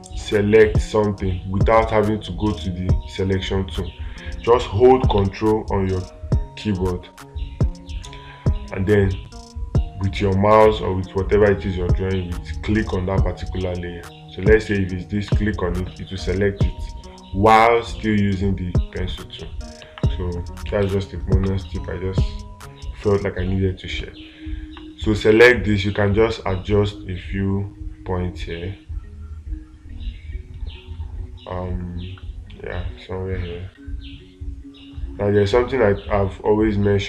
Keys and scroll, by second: 21.1 space.